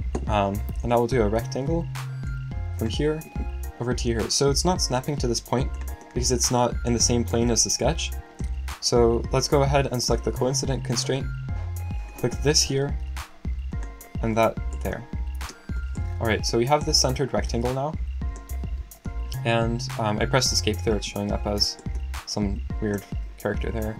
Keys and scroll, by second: 18.9 Escape, 23.5 l.